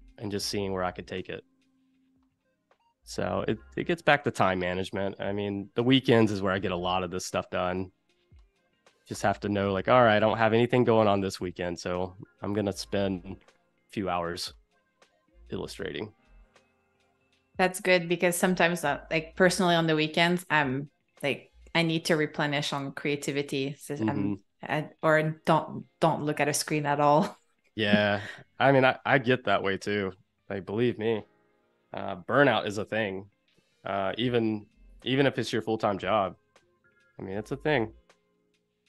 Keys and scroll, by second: 4.8 space, 19.3 space, 26.6 space, 33.0 super+-, 33.7 super+-, 34.2 space, 35.8 z, 36.4 a.